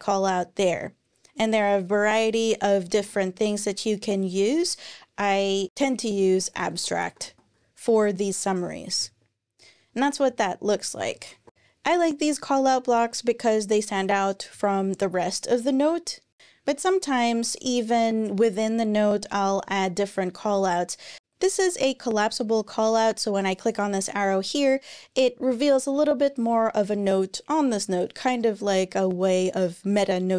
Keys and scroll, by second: 1.8 Right, 2.8 alt+shift+Left, 6.0-7.5 typing, 8.8 Page_Up, 10.8 shift+Page_Down, 10.9 shift+Page_Down, 11.4 BackSpace.